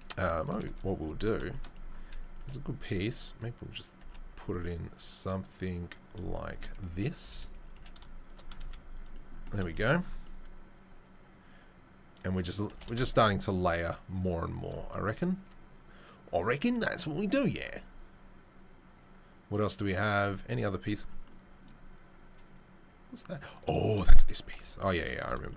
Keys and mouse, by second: 0.1 r, 2.4 g, 3.0 s, 4.0 g, 7.7 g, 8.6 z, 20.1 click, 20.2-22.6 middle drag, 22.6-23.4 drag, 23.4-25.5 middle drag, 24.5 KP_7.